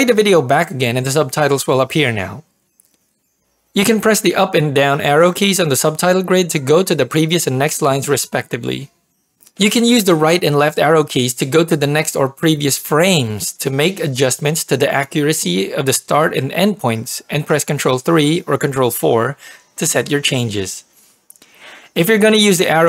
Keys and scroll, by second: 0.0 ctrl+p.